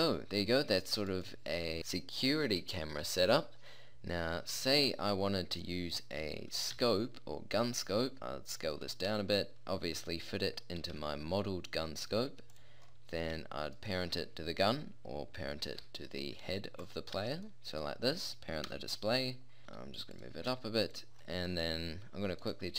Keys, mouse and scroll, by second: 6.8 s, 8.2-9.2 drag, 10.9 g, 11.3-12.1 middle drag, 15.7 ctrl+p, 17.2 a, 17.6 middle click, 18.7 KP_0, 19.7 g, 19.7 g, 20.5 s, 21.8 middle click.